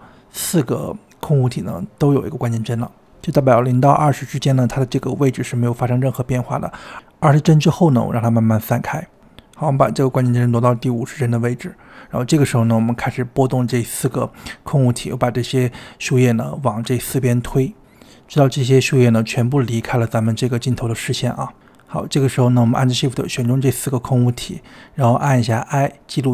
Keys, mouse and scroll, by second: 9.6-13.1 drag, 13.1-15.4 drag, 15.7-16.9 drag, 17.7-18.9 drag, 19.2-20.2 drag, 20.2 scroll down 3, 20.4-20.8 shift+middle drag, 20.8-22.2 drag, 22.7-26.3 shift+drag.